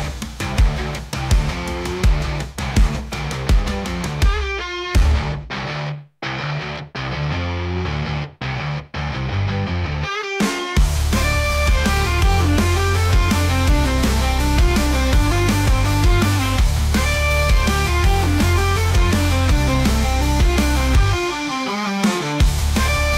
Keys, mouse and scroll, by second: 7.9 g, 9.6-11.1 middle drag, 13.6 `, 14.4 g, 17.0 shift+click, 17.7 ctrl+KP_Subtract, 18.4-19.6 middle drag, 19.6 click, 20.5-21.8 drag, 22.6 click.